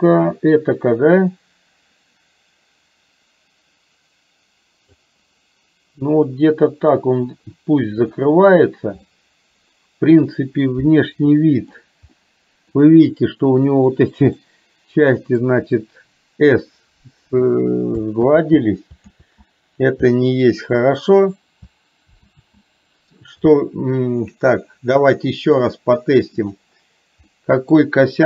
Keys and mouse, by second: 8.0 click, 9.1-11.5 middle drag, 11.7 middle click, 12.2-12.9 middle drag, 14.5-15.5 middle drag, 18.6 ctrl+z, 19.5 ctrl+z, 22.6 ctrl+z, 25.4 middle click, 26.5 drag, 27.4 middle click.